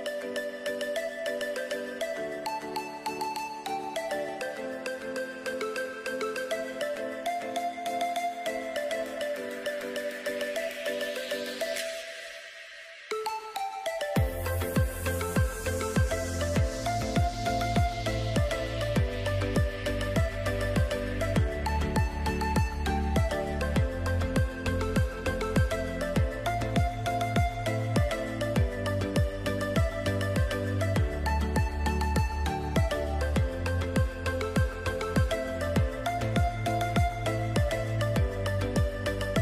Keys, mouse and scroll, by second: 2.2 click, 7.5 click, 8.7 shift+click, 9.8 click, 11.8 right click, 13.4 click, 17.9 ctrl+z, 18.8 right click, 20.4 click, 20.9 right click, 23.1 click, 26.5-27.4 scroll down 3, 26.9 click, 27.8 alt+scroll up 2, 28.3 click, 30.2 alt+scroll down 2, 30.7 click, 32.7 alt+scroll down 2, 33.2 alt+click, 34.9 scroll up 1, 35.7 click.